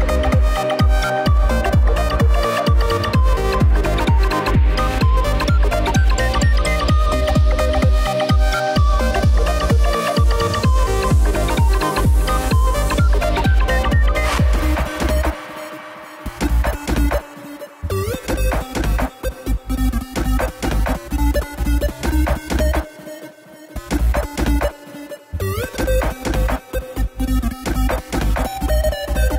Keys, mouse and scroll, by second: 0.3 shift+d, 3.0 click, 3.3 scroll down 2, 3.4-5.7 middle drag, 5.7 click, 6.2-8.1 middle drag, 8.1 click, 8.9 KP_1, 9.2 scroll up 1, 9.7 s, 12.6 click, 13.7 KP_3, 15.2 g, 16.2 click, 17.1 scroll down 1, 17.3-19.2 middle drag, 19.2-19.8 scroll up 1, 19.8 click, 20.6 KP_7, 20.9-21.4 scroll up 1, 21.4-21.7 shift+middle drag, 21.7 shift+scroll up 1, 22.4 click, 27.0 Tab, 27.3 scroll up 1, 27.6 shift+middle click, 28.1-29.3 scroll up 3.